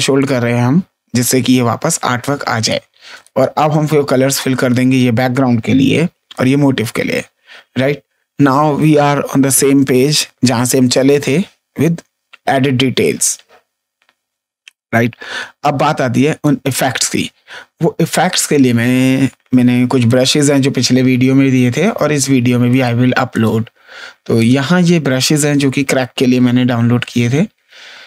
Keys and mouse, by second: 0.1 click, 2.5 click, 4.5 click, 5.7 x, 6.3 click, 16.1 space, 16.3 click, 20.0 click, 22.6 right click, 23.3 click, 24.3 click.